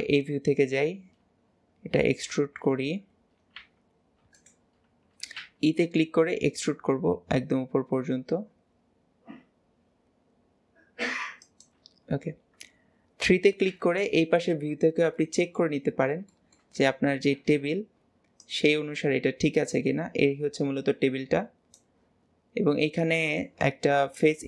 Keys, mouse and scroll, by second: 14.6 scroll up 1, 15.2 shift+middle click, 16.0-16.4 scroll up 1, 16.4-24.4 shift+middle drag.